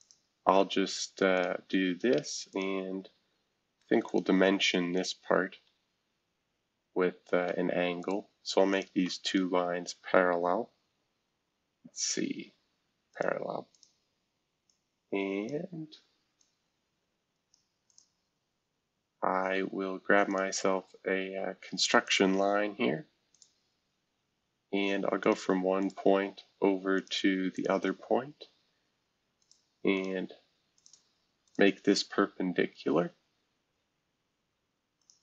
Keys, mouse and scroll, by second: 0.0 click, 1.3 click, 2.5 click, 4.0 click, 4.9 click, 5.5 Escape, 6.2 scroll down 2, 6.8 scroll up 2, 8.0 click, 8.7 shift+click, 13.1 click, 13.7 click, 14.7 click, 16.4-17.5 drag, 17.9 click, 18.8 scroll down 2, 20.3 click, 22.0 click, 23.3 click, 24.0-24.6 scroll up 1, 24.6-25.2 scroll up 1, 25.2 click, 25.8 click, 26.1 Escape, 26.9 click, 27.5 shift+click, 29.4 click, 29.9 click, 30.7 click, 31.4 shift+click, 35.0 click.